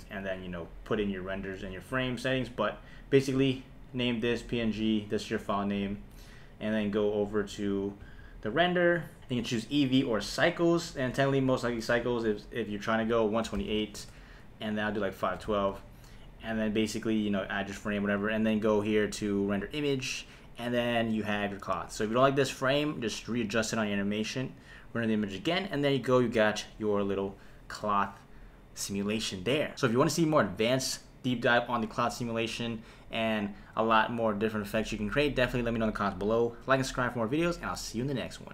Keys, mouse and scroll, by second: 3.4-6.1 drag, 6.7 click, 7.4 click, 10.5-11.7 drag, 12.8-14.0 drag, 14.8 click, 17.1 click, 18.6-20.0 drag.